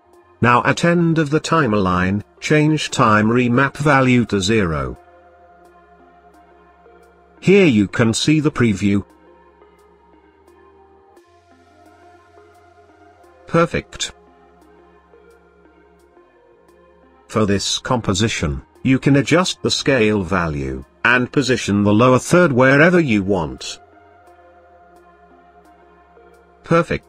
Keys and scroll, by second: 17.1 s.